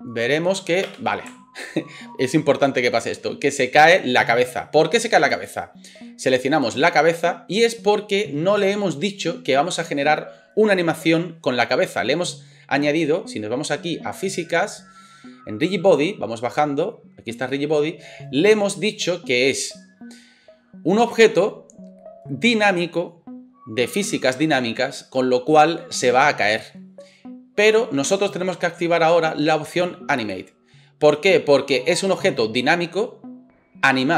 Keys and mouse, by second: 0.8 space, 5.4-30.3 drag, 6.2 middle click, 6.2 right click, 30.3-34.1 middle drag.